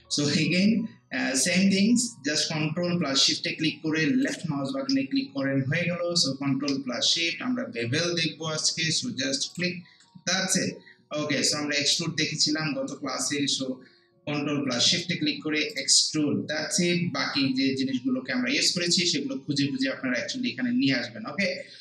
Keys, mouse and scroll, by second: 0.4 ctrl+shift+click, 4.2 ctrl+shift+click, 9.5 ctrl+shift+click, 13.1 ctrl+shift+click, 15.7 ctrl+shift+click.